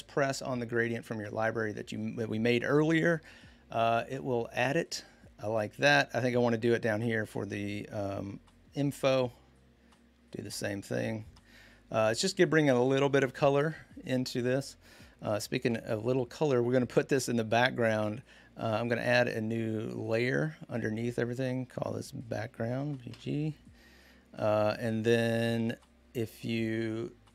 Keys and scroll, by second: 22.1 b, 22.6 g, 22.9 Return.